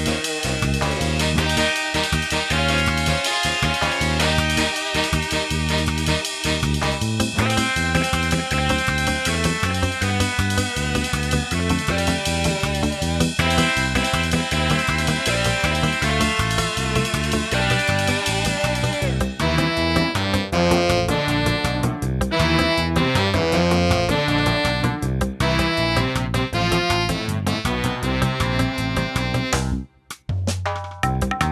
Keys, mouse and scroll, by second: 4.2 click, 4.5 shift+middle click, 7.3 shift+middle click, 7.3 shift+d, 10.4 middle click, 11.5 scroll down 2, 12.1 shift+middle click, 13.3 scroll up 2, 13.7 scroll down 3, 13.8 middle click, 14.6 scroll down 1, 15.7 shift+d, 17.9 scroll up 2, 18.3 scroll down 2, 18.5 scroll up 1, 18.8 g, 20.1 shift+Tab, 20.4 middle click, 20.6 shift+middle click, 20.8 scroll up 1, 20.9 middle click, 21.3 scroll up 1, 21.5 shift+middle click, 23.1 shift+d, 25.0-25.3 scroll down 4, 25.5 shift+middle click, 26.1 scroll down 1, 26.3 shift+middle click, 26.7 scroll up 1, 27.1 shift+d, 28.0 scroll down 1, 28.2 shift+middle click, 28.6 scroll up 1, 29.1 shift+d, 30.2 scroll down 1, 30.5 scroll up 1, 30.8 shift+middle click.